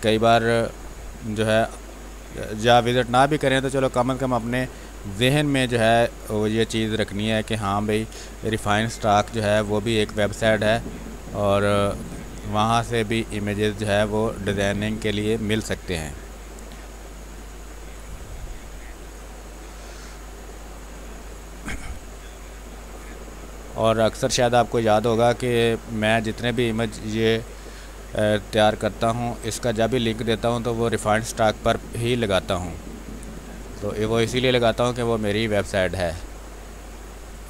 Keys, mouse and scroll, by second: 2.8 x, 5.5-6.9 drag, 6.9 x, 7.2 click, 8.1 space, 8.2 click, 8.5 space, 9.7 ctrl+click, 11.8 x, 11.9-13.3 drag, 13.3-19.5 drag, 19.5 space, 20.3-21.9 drag, 21.9 space, 22.4 alt+click, 22.8 click, 24.0-31.5 drag, 31.5 space, 31.8-37.4 drag.